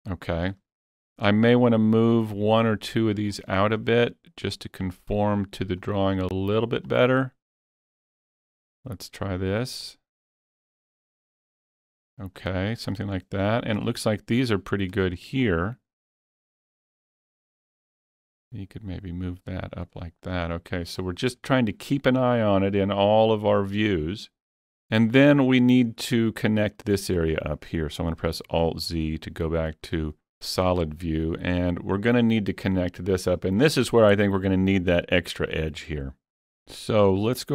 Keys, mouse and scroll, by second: 0.3 scroll up 1, 0.6 shift+middle click, 2.2 click, 3.3 scroll up 3, 3.7 shift+middle click, 4.6-6.9 drag, 6.9-8.7 drag, 8.7-11.0 drag, 11.0-13.5 drag, 13.2 scroll up 1, 13.5-15.0 shift+middle drag, 15.1 shift+middle click, 15.6-16.6 scroll up 1, 16.6-17.2 scroll up 1, 17.9-21.5 drag, 20.2 scroll down 1, 20.6 shift+middle click, 21.5 shift+middle click, 28.1 shift+middle click, 28.1 scroll down 1, 28.3 alt+z, 29.2-34.2 shift+middle drag.